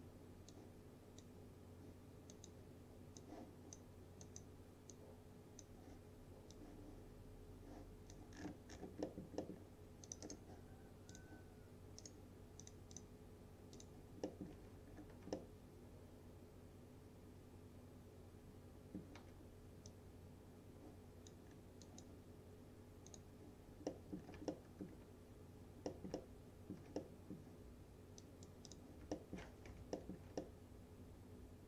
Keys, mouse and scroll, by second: 8.4-9.1 scroll down 1, 9.1 middle click, 10.1 click, 10.3 right click, 11.2 click, 11.2 click, 12.1 right click, 12.7 click, 14.3 middle click, 14.9-15.3 scroll up 1, 15.4-19.1 alt+middle drag, 19.9-21.5 drag, 21.5-21.9 scroll down 1, 21.9 click, 23.9 middle click, 24.3 scroll down 1, 24.6-25.2 alt+middle click, 25.4 scroll up 1, 25.9 middle click, 26.0 middle click, 26.5 alt+middle click, 27.3-27.7 middle click, 28.3 click, 29.2 alt+middle click, 29.7 F4, 30.0 middle click, 30.5-31.6 alt+middle drag.